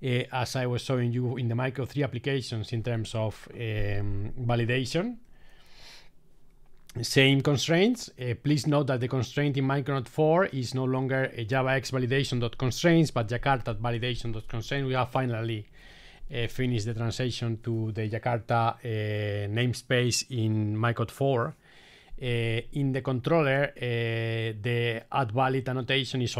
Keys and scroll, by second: 5.8 super+e.